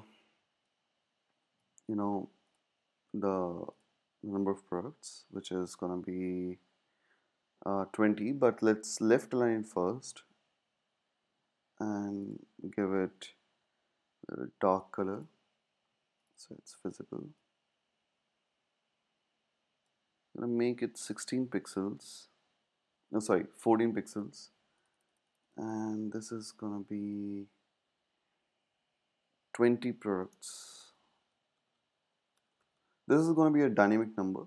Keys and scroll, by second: 21.7 Down, 21.9 Down, 26.5 super+a, 29.9-34.4 typing.